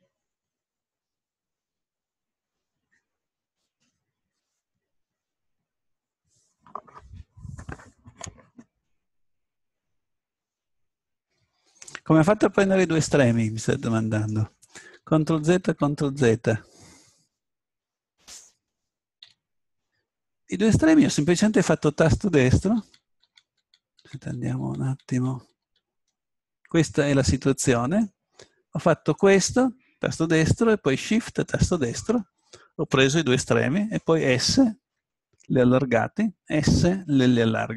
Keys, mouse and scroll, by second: 13.6 click, 14.8 ctrl+z, 15.2 ctrl+z, 15.6 ctrl+z, 16.0 ctrl+z, 19.2 a, 22.8 ctrl+z, 23.2-24.3 ctrl+z, 24.6 ctrl+z, 24.9 ctrl+z, 25.1 ctrl+z, 25.3 ctrl+z, 25.6 ctrl+z, 27.4-29.1 drag, 29.2-31.2 right drag, 31.5-33.4 right drag, 34.2 s.